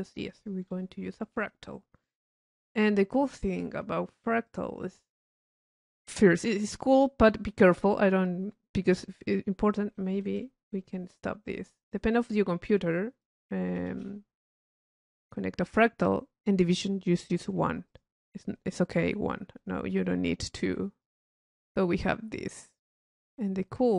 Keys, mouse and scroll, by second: 0.4 click, 4.6 click, 10.8 Escape, 11.6-21.3 drag, 23.0-23.9 drag.